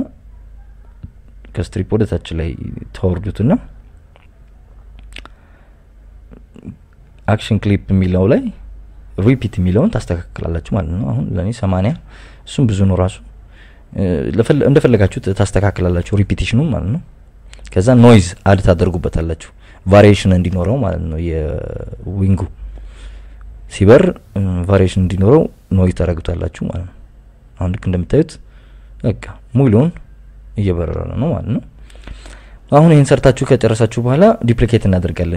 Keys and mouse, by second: 1.6 click, 5.4 click, 7.7 click, 9.2 click, 10.8-11.2 drag, 12.0-13.9 drag, 14.5 click, 19.6-20.7 drag, 24.0-25.3 drag, 26.2-27.2 drag, 27.6 drag, 28.1 click, 32.7 click, 33.7 click, 35.0 KP_7.